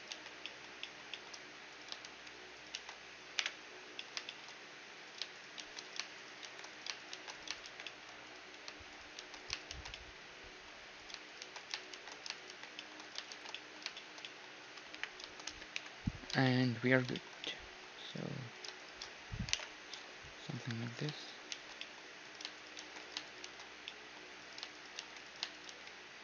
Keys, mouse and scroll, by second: 0.1 shift+r, 0.5-3.0 drag, 2.1 shift+r, 2.8 shift+r, 3.0 middle click, 3.4 KP_Divide, 4.0 click, 4.3 middle click, 5.1-6.3 drag, 5.1-15.1 right drag, 5.6 shift+r, 6.3 middle click, 6.5 shift+r, 7.1 shift+r, 7.7 shift+r, 7.9-9.7 middle drag, 9.2 shift+r, 9.7 shift+r, 9.9-11.8 middle drag, 11.4 shift+r, 11.9 shift+r, 12.5 shift+r, 12.8-16.2 middle drag, 13.3 shift+r, 15.0 KP_1, 15.8 ctrl+KP_3, 16.5-19.6 middle drag, 18.1 right click, 18.6-19.6 drag, 19.6 alt+m, 19.6-20.7 right drag, 20.9 right click, 21.6 shift+r, 21.9-23.5 drag, 21.9-25.7 middle drag, 22.8 shift+r, 23.5-26.2 right drag, 23.5 shift+r, 25.0 shift+r, 25.7 shift+r.